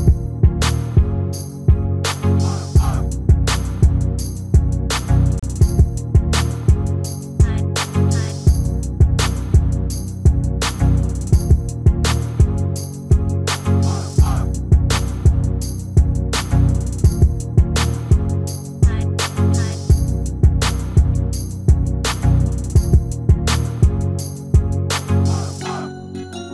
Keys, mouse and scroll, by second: 1.1-2.8 drag, 2.5 shift+a, 8.0-9.7 drag, 10.7 r, 17.9 r, 21.0-22.8 middle drag, 22.8-24.5 drag, 24.6 middle click, 25.9 s.